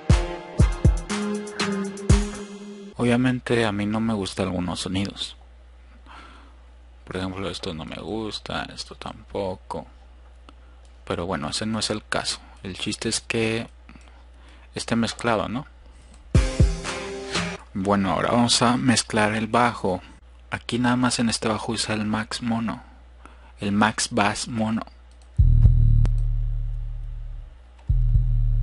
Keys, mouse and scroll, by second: 2.9 scroll up 2, 19.5-20.8 drag, 21.0 click, 22.0 click.